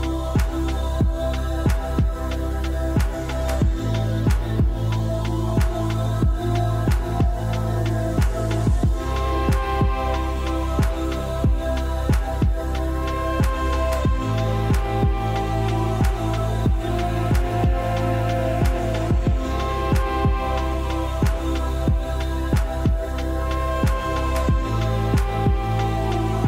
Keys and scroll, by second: 3.9 BackSpace, 5.0 6, 5.1 Return.